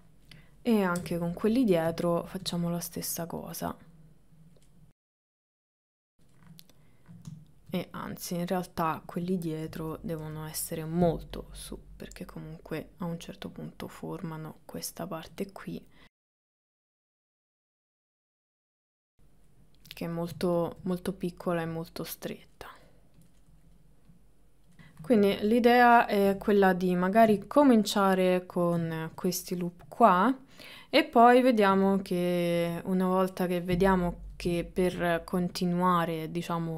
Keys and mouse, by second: 1.0 KP_7, 2.0 middle click, 3.1 click, 3.7 middle click, 4.7 middle click, 5.8 click, 6.4 middle click, 8.1 click, 8.6 middle click, 9.7 KP_1, 10.3 KP_3, 11.5-12.9 drag, 13.6-14.7 drag, 15.4 click, 16.1 click, 17.1 click, 17.9 click, 18.2 middle click, 18.6 ctrl+middle click, 18.8 shift+middle click, 20.0 middle click, 21.6 click, 22.6 middle click, 23.4 middle click, 24.2 click, 24.8 middle click, 25.2 KP_1, 26.6 middle click, 27.5-28.8 shift+middle drag, 29.0 ctrl+middle click, 29.7-31.1 middle drag, 31.7 KP_1, 32.6 KP_3, 34.7 shift+middle click, 35.6 click.